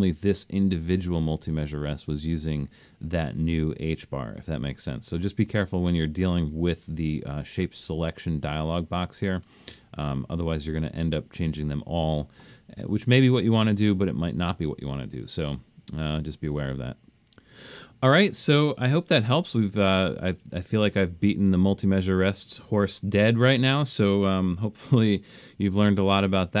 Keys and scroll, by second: 25.7 alt+super+/.